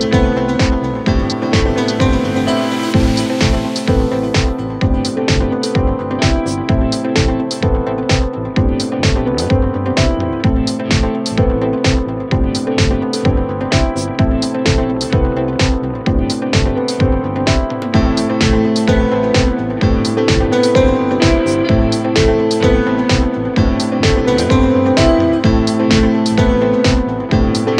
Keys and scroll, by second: 0.8 Delete.